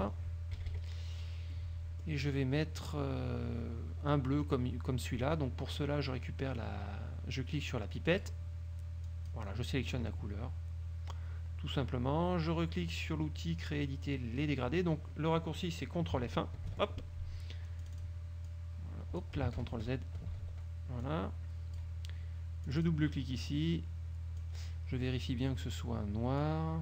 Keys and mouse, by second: 0.6 KP_Subtract, 1.7 middle click, 8.2 click, 9.2 click, 16.8 ctrl+F1, 18.0 click, 18.6 click, 19.7 ctrl+z, 21.2 click, 22.8 click, 23.5-24.7 drag, 26.5 click.